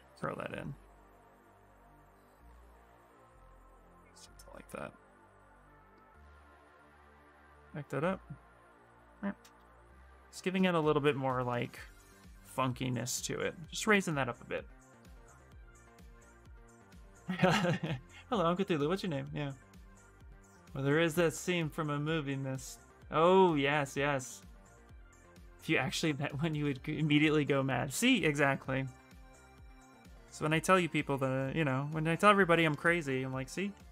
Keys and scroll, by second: 0.5 q, 1.6 w, 4.4 q, 7.0 ctrl+z, 7.3 w, 7.7 w, 11.2 q, 29.7 b.